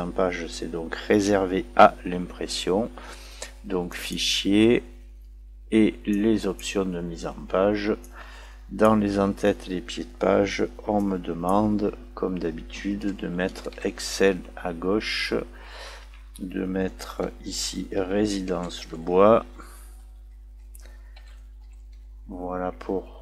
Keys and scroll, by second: 14.4 Tab, 16.0 Tab, 19.7 space, 20.5 space.